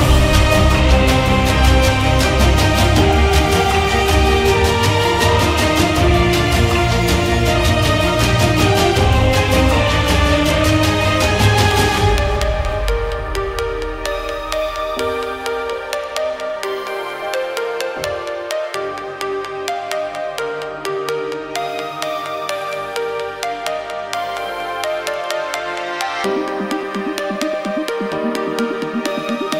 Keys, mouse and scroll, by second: 24.7-28.4 drag, 24.7 1.